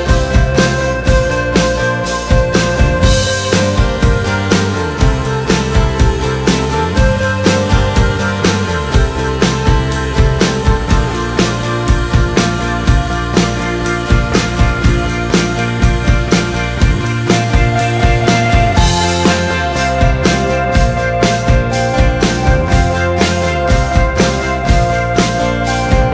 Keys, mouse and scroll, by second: 0.1-8.4 drag, 15.7 click, 21.6-23.0 drag, 24.5-25.7 drag.